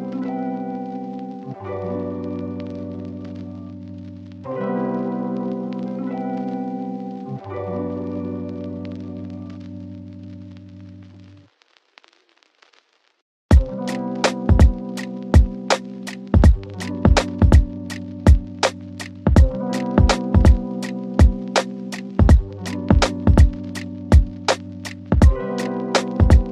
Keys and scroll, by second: 21.0 ctrl+r, 24.8 ctrl+r.